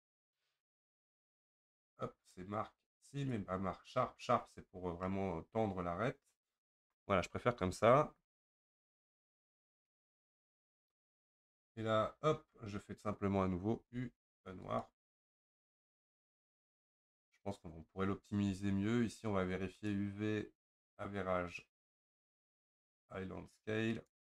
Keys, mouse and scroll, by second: 1.4 ctrl+z, 3.3-4.7 right drag, 4.7-5.1 scroll down 2, 5.1-8.2 middle drag, 8.2 3, 10.3 a, 14.8 u, 24.1 click.